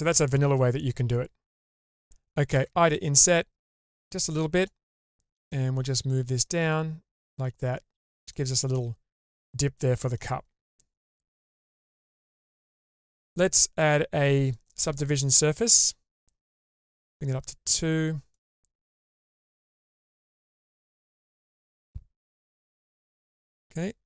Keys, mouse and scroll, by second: 3.2 i, 5.0-5.5 middle drag, 6.4-8.3 drag, 8.8-10.2 middle drag, 10.4 scroll down 2, 10.7-11.7 middle drag, 11.8 Tab, 12.6 Tab, 14.5-15.1 drag, 15.3 click, 15.9-18.4 drag, 19.6 click, 20.0-20.9 middle drag, 21.1 shift+space, 22.3 Tab, 23.4-24.0 middle drag.